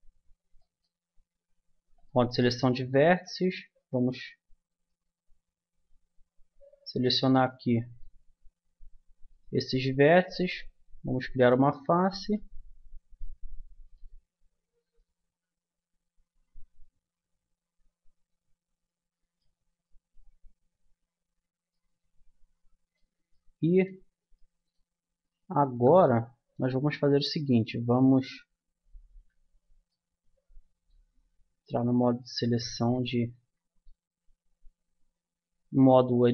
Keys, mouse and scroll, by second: 2.8 click, 3.6-4.7 middle drag, 4.7-6.2 drag, 6.9-8.7 drag, 8.7 middle click, 9.3-10.9 drag, 10.8 f, 11.1-12.7 middle drag, 13.5 middle click, 15.2-16.8 middle drag, 19.7-20.7 middle drag, 25.7 z, 26.7 z, 28.3 Tab, 29.1 Tab, 32.0 z, 33.4 a.